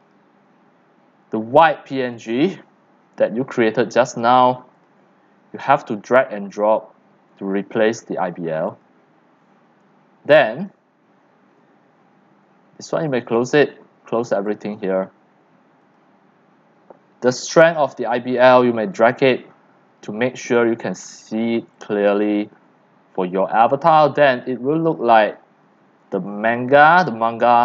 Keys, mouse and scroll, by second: 0.0 click, 2.1 click, 2.8-4.7 drag, 4.8 click, 5.3 drag, 5.7 click, 6.7-7.9 drag, 12.9 click, 13.6 middle click, 14.3 click, 15.0 middle drag, 15.8 click, 17.5-18.6 drag, 21.0-21.3 scroll down 3, 21.3 click, 21.3 click, 21.7 x, 22.0 c, 22.5 click, 22.7 c, 22.9 middle click, 23.2 middle click, 23.9-27.6 typing, 24.0 click, 27.0 click.